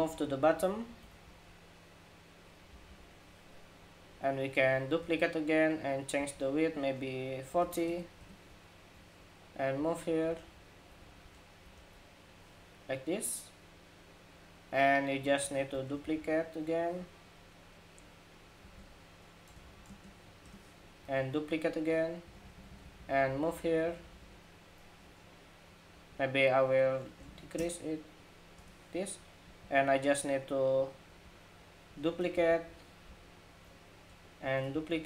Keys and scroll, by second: 2.4 alt+Down, 4.7 super+d, 15.3 super+d, 16.6 super+d, 20.9 super+d, 22.2 super+d, 31.6 super+d, 34.4 super+d.